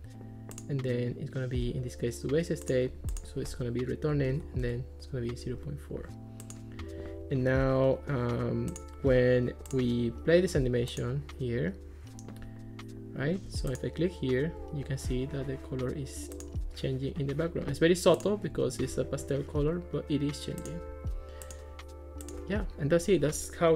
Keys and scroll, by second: 4.2 ., 4.6 Return.